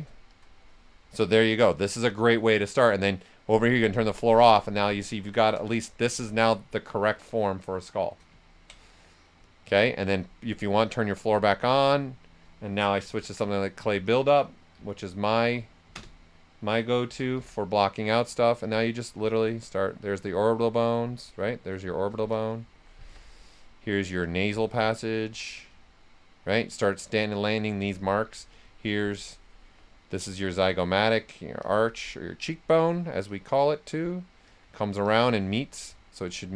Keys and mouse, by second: 0.3 click, 1.2 right click, 3.7 click, 4.2 right click, 5.0 shift+click, 5.7-8.4 right drag, 8.4 ctrl+right click, 9.6 click, 11.2 ctrl+right click, 11.6 s, 11.7-13.0 drag, 12.8-17.8 typing, 18.6-20.8 alt+drag, 20.8-22.3 right drag, 22.3 alt+click, 22.9 s, 23.0 click, 24.2 alt+click, 25.5-27.8 right drag, 27.8 s, 27.8-30.2 drag, 30.2 click, 31.3 click, 32.3 right click, 33.2 click, 33.8 right click, 34.4 click, 35.4 right click, 36.3 click.